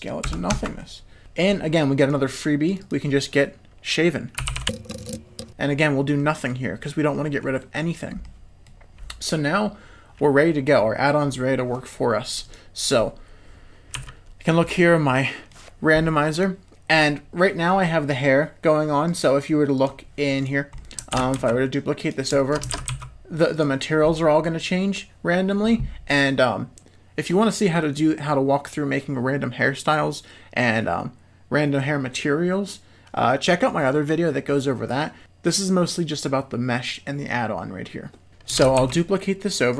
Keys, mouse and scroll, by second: 0.8 middle click, 1.2 Tab, 2.7-4.6 drag, 6.2-6.5 middle drag, 7.1 middle click, 8.2-8.6 middle drag, 12.4 click, 13.9 z, 14.6-15.5 middle drag, 16.9 click, 20.4 click, 20.7 middle click, 21.4 shift+d, 22.4 shift+middle drag, 23.0 shift+d, 24.0-24.6 middle drag, 38.8 shift+d.